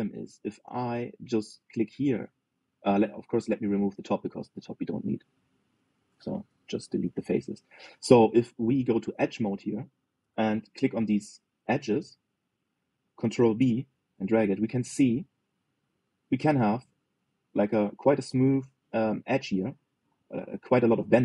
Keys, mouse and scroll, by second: 1.7 click, 2.1 middle click, 2.6 click, 3.8 click, 4.1 shift+middle click, 4.6 click, 5.0 shift+click, 5.3 shift+click, 5.6 shift+click, 5.9 shift+click, 6.1 shift+click, 6.4 shift+click, 6.6 shift+click, 7.3 Delete, 8.3-9.5 middle drag, 9.5 click, 10.2 middle click, 10.7-11.5 scroll up 1, 11.5 click, 14.2 ctrl+b.